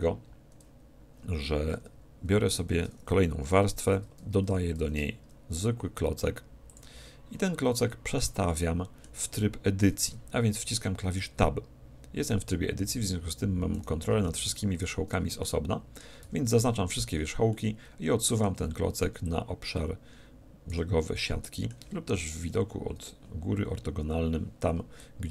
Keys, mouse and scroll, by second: 1.7 Tab, 2.4 Tab, 3.4 6, 4.7 shift+a, 7.3-10.2 middle drag, 10.0 Tab, 13.7-16.4 right drag, 15.4-17.2 middle drag, 16.2 a, 16.6 a, 17.5-19.2 middle drag, 19.2-21.0 drag, 21.2-22.8 middle drag, 22.4 KP_7, 23.3-25.0 scroll up 1, 25.0-25.3 drag.